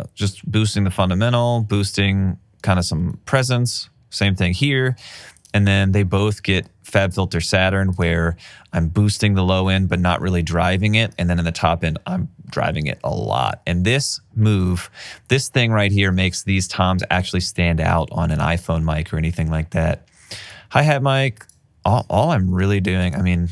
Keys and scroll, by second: 2.2 alt+super+w, 4.5 alt+super+w, 16.3 alt+super+w, 22.7 alt+super+w.